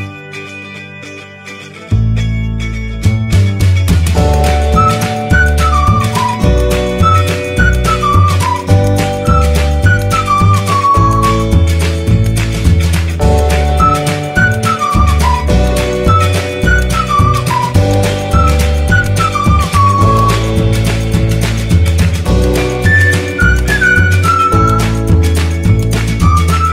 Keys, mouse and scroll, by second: 3.3 click, 3.6 t, 11.2 click.